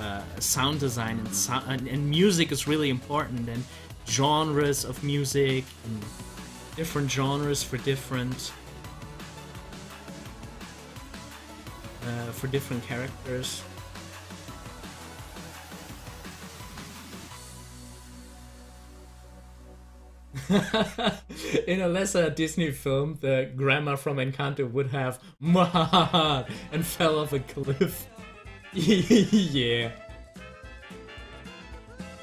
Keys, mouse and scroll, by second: 7.4 scroll up 1, 13.2 scroll down 1, 19.2 click.